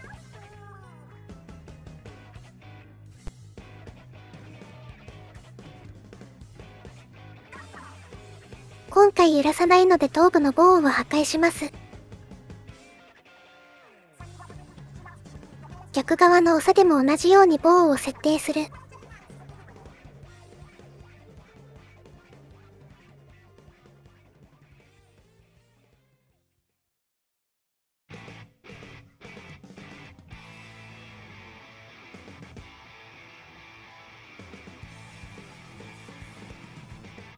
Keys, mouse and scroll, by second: 0.1 middle click, 0.5 KP_1, 1.2 g, 1.7 middle click, 1.9 middle click, 2.2 middle click, 3.7-5.3 middle drag, 6.1 click, 6.4-7.7 middle drag, 8.0 middle click, 8.4 middle click, 9.1 click, 10.2 Delete, 11.1 shift+middle click, 11.3 middle click, 12.1 click, 12.2 middle click, 13.6 Delete, 14.0 middle click, 14.9 middle click, 15.1 middle click, 15.3 middle click, 15.5 middle click, 16.2 middle click, 16.3 middle click, 16.5 middle click, 16.6 middle click, 16.8 middle click, 17.7 shift+middle click, 17.9 middle click, 18.3 shift+middle click, 18.6 KP_1, 19.8 e, 20.4-22.6 e, 23.3 KP_3, 24.3 shift+middle click, 24.5 shift+middle click, 24.8 shift+middle click, 26.2 g, 27.1 g, 28.8 shift+click, 29.3 g, 30.2 g, 30.9 click, 31.9 click, 32.2 click, 32.4 click, 32.6 shift+click, 33.1 click, 33.9 g, 34.4 shift+click, 34.7 click, 35.2 g, 35.6 shift+click, 36.1 g, 36.5 shift+click.